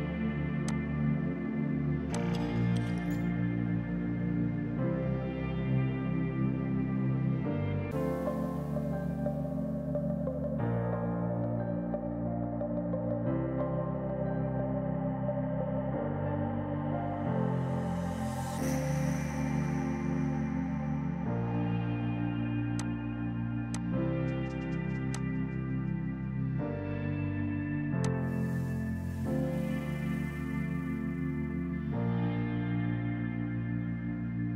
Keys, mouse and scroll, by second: 0.7 click, 24.7-25.7 typing, 25.2 click, 28.1 click.